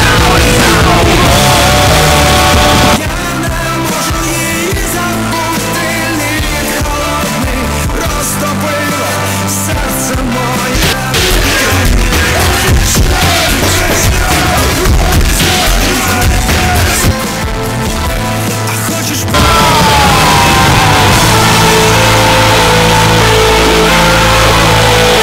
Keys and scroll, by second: 3.0 Page_Down.